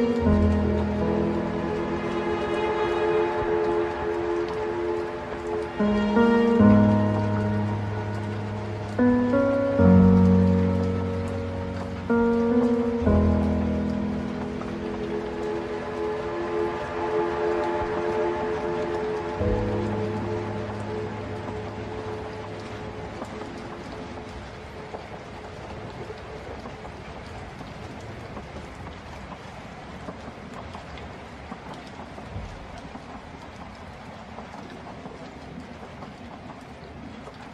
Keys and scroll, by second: 25.0 ctrl+z, 35.5 ctrl+z.